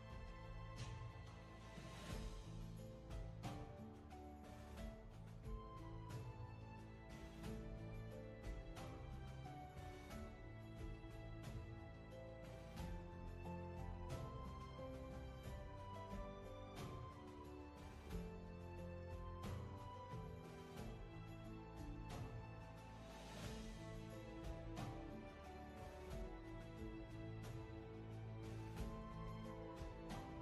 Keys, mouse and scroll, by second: 30.2 ctrl+z.